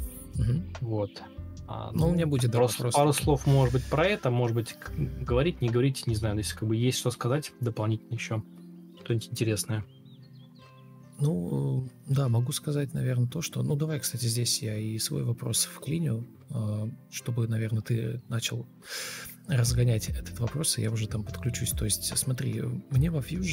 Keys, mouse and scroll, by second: 3.3 shift+Left, 3.9 ctrl+c, 3.9 ctrl+z, 6.3 ctrl+v, 10.4 ctrl+shift+space, 12.5 ctrl+space, 13.7 ctrl+space, 14.0 ctrl+space, 18.5 Escape, 22.4 Escape.